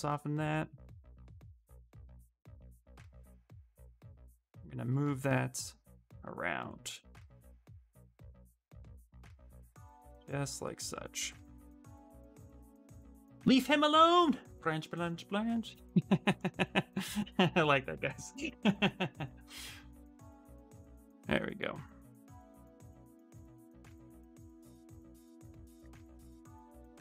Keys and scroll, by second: 10.9 q, 15.4 s.